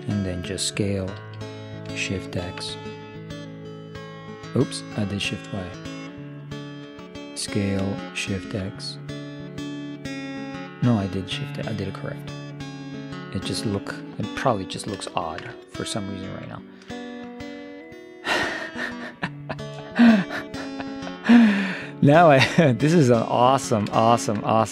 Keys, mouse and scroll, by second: 1.3 s, 7.4 s, 14.0-18.7 middle drag, 22.3-24.5 middle drag.